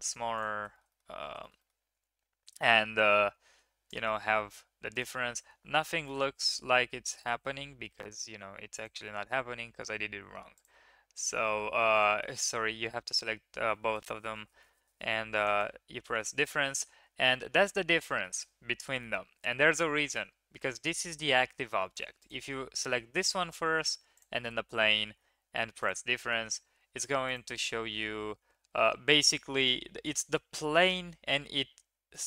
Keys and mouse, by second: 0.0 ctrl+a, 0.7 shift+middle click, 0.9 middle drag, 1.4 shift+middle drag, 1.6 middle click, 1.7 click, 1.7 middle click, 4.0 click, 4.9 click, 6.0 h, 6.9 ctrl+z, 8.8 click, 10.6-11.6 drag, 11.9 shift+click, 15.4 click, 16.7-18.2 middle drag, 19.1 ctrl+z, 22.2 click, 24.1 shift+click, 25.8 click, 27.2 click, 27.5-27.9 drag.